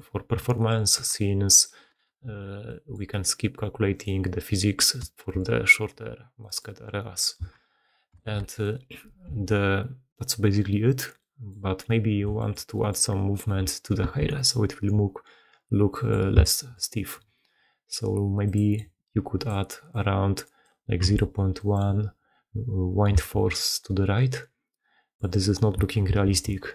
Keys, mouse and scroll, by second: 1.8 shift+space, 2.5 click, 2.7 middle click, 3.8 middle click, 5.1 shift+middle click, 6.3 middle click, 8.1 shift+space, 9.3 g, 11.2-11.6 middle drag, 14.0 shift+space, 23.2 shift+space, 23.8 middle click, 26.0 shift+space.